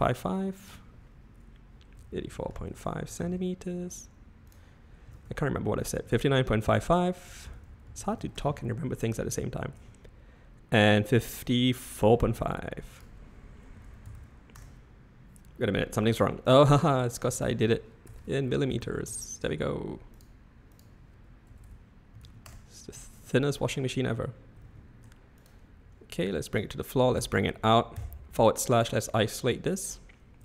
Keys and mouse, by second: 0.6-4.2 drag, 4.6 click, 6.2-9.5 drag, 8.1 5, 9.8-12.0 alt+middle drag, 12.9-19.8 drag, 18.2 BackSpace, 20.3-23.3 drag, 21.6 BackSpace, 24.5 g, 26.6 click, 27.9 /, 29.2-29.9 middle drag.